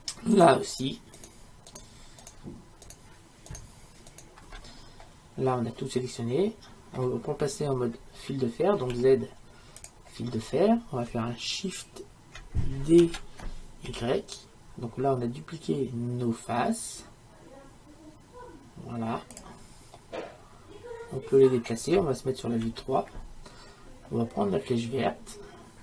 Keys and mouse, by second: 6.1-9.0 middle drag, 9.0 z, 10.3-12.5 middle drag, 13.1 shift+d, 20.0-22.7 middle drag, 22.7 KP_3.